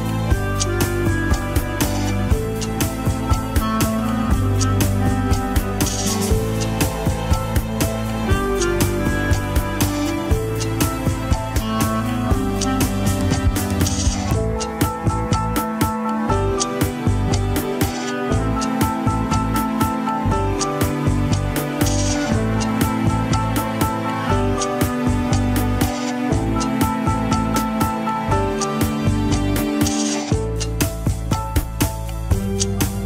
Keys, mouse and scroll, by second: 0.2 click, 0.8 e, 2.1 KP_3, 2.3-2.8 scroll up 1, 2.8 g, 3.3 a, 4.8 Tab, 5.1 click, 5.3 Tab, 5.9 g, 7.3 Tab, 7.4 click, 7.7 Tab, 8.0 r, 9.7 click, 10.0 scroll up 2, 10.3 s, 10.7 scroll down 2, 10.9 middle click, 11.3 alt+z, 11.5 middle click, 12.0 Tab, 12.3 KP_3, 12.5 scroll up 3, 12.6 alt+z, 13.1 click, 13.3 Tab, 13.7 g, 14.9 alt+z, 15.4 alt+z, 15.6 middle click, 16.3 alt+z, 16.5 g, 17.1 KP_3, 17.4 Tab, 17.7 click, 17.9 Tab, 18.1-19.0 scroll up 3, 19.0-21.5 drag, 21.5 r, 22.8 scroll down 4, 23.1 shift+middle click, 23.5 Tab, 23.7-24.3 shift+middle drag, 24.3 click, 24.5 Tab, 24.7 click, 25.2 l, 27.7 KP_1, 28.0 scroll up 1, 28.2 s, 29.0 shift+middle click, 29.7 Tab, 29.8 click, 30.0 KP_3, 30.2 scroll down 2, 30.4 shift+middle click, 30.7 Tab, 31.0 alt+z, 31.3 click, 31.8 alt+z, 32.1 r.